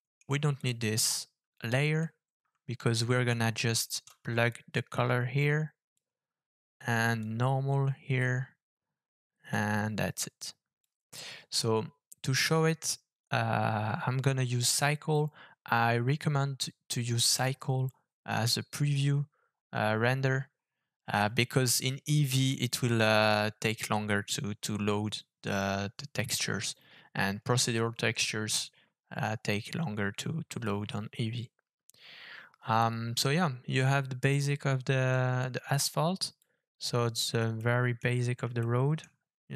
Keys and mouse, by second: 0.0 middle click, 0.6 click, 1.9 End, 2.3 Delete, 3.4 click, 4.5-6.0 drag, 7.3-8.2 drag, 9.5-10.9 drag, 14.9 click, 35.4-36.4 drag, 37.6-38.0 middle drag, 38.6-38.9 shift+middle drag, 38.9 click.